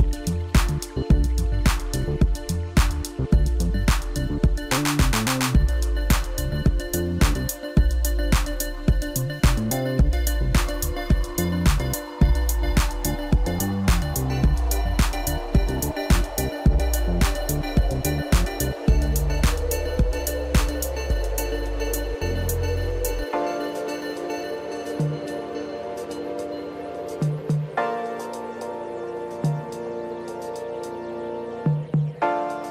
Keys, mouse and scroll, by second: 0.5 click, 1.4 Tab, 2.1 click, 3.5-4.7 drag, 9.4-10.6 scroll down 1, 10.6-12.5 scroll down 1, 12.8-15.0 drag, 15.2 scroll down 4, 15.4-18.5 middle drag, 19.2 KP_1, 19.9-20.7 scroll up 1, 20.7 ctrl+KP_2, 21.8-22.2 scroll up 2, 22.2 scroll down 2, 22.5-25.6 middle drag, 27.4 click, 27.8-29.1 scroll down 9, 29.1-30.4 drag, 30.8-31.6 scroll down 2, 31.6 KP_1.